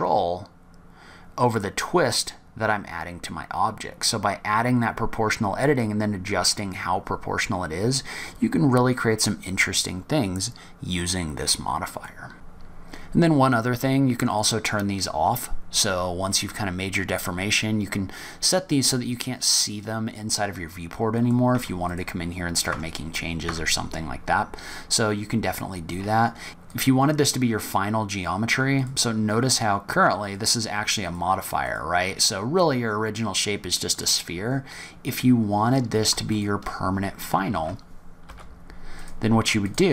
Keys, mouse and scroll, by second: 12.3 Tab, 14.2 click, 16.1 click, 19.6 click, 21.1 click, 21.5 Tab, 21.8 click, 22.6 Tab, 23.3 Tab, 26.6 click, 28.7 click, 30.2 click, 31.0 click, 31.5 click, 33.9 click, 36.2 shift+click, 36.8 scroll down 4, 37.4 shift+d, 39.6 click.